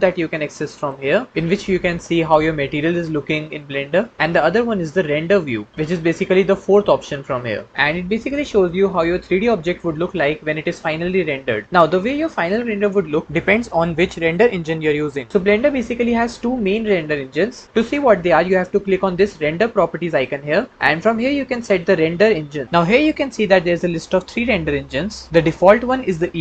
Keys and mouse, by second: 19.9 click, 21.6-26.4 drag.